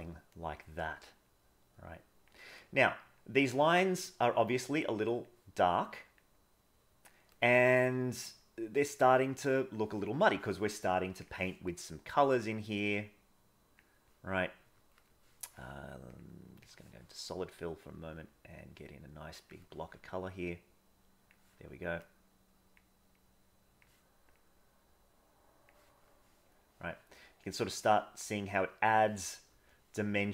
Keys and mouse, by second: 1.3-2.3 drag, 3.2 click, 4.7 click, 5.8 click, 6.7 click, 8.4 click, 9.4 click, 13.0 click, 15.0 middle click, 16.2 click, 17.6-19.5 drag, 20.6 click, 22.1 click, 23.2 click, 24.3-25.7 drag, 26.6 middle click, 27.5-29.0 drag.